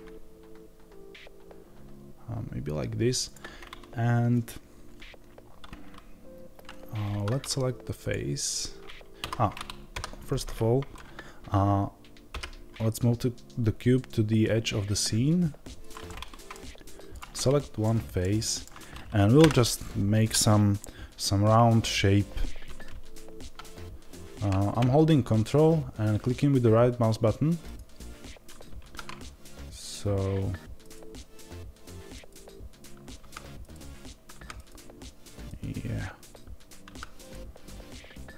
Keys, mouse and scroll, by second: 7.0 3, 7.9 click, 15.9-17.0 middle drag, 17.0 click, 17.7-19.3 middle drag, 19.3 KP_7, 27.5-33.1 ctrl+right drag, 33.1 ctrl+z, 33.5 ctrl+right click, 34.2 ctrl+z, 34.4-36.8 ctrl+right drag, 36.8 ctrl+z, 37.1-38.3 ctrl+right drag.